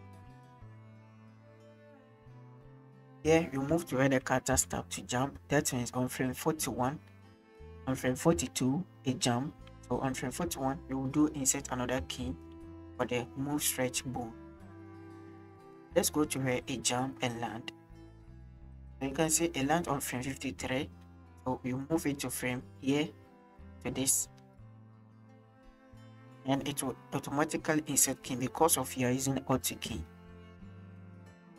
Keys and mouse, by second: 3.4 shift+click, 4.6 Left, 8.4 Right, 9.7 Left, 12.0 i, 14.9 click, 15.8 middle click, 16.4-19.1 drag, 21.0 shift+middle drag, 21.0 shift+drag, 30.3 shift+middle click, 31.2 middle click.